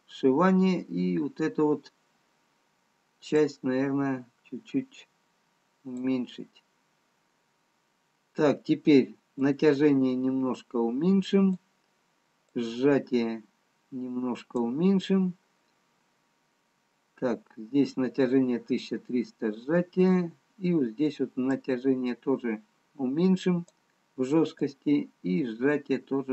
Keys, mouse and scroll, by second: 5.1 click, 10.1 click, 15.6-16.9 scroll down 1, 19.7-20.8 scroll up 2, 21.9 click, 21.9-22.3 scroll up 1.